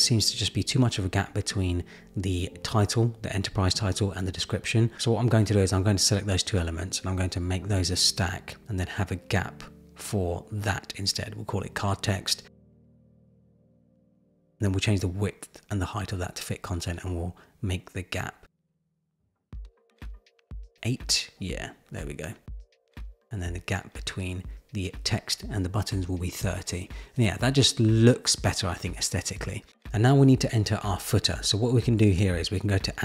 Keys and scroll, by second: 14.1 Return.